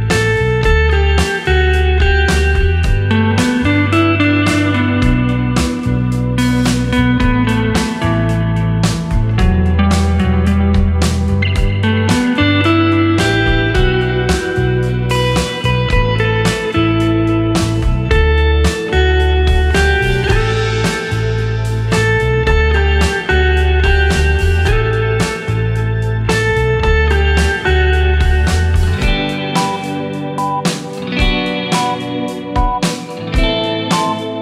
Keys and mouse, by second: 5.0-8.1 drag, 13.6 click, 14.2 click, 15.1-17.8 drag, 22.2-24.2 drag, 25.4-34.4 drag, 28.7 BackSpace.